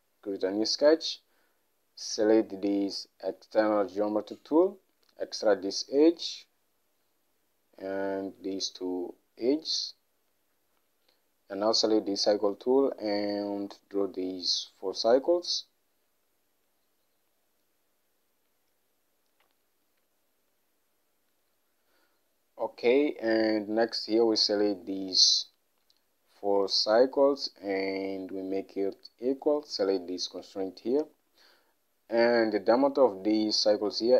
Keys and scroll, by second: 23.4 Escape.